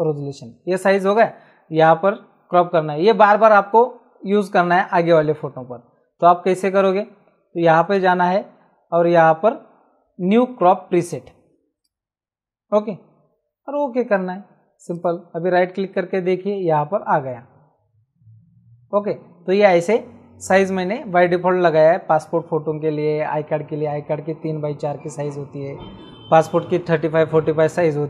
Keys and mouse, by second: 0.0 Return, 0.0 KP_Enter, 1.8 click, 5.7 Escape, 7.8 click, 11.8 click, 14.1 click, 14.9 right click.